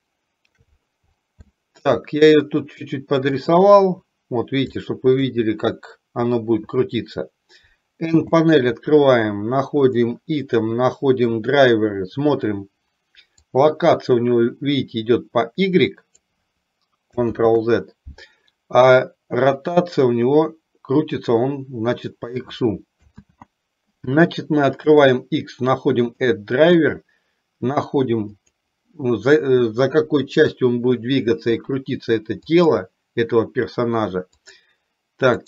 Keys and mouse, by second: 0.0-0.6 shift+middle drag, 1.6-2.0 shift+middle drag, 3.5 click, 5.0 shift+middle click, 8.2 n, 10.0 click, 13.5-16.2 drag, 17.5 ctrl+z, 19.7-22.3 drag, 23.2 ctrl+z, 25.0-32.8 right drag, 34.6 click.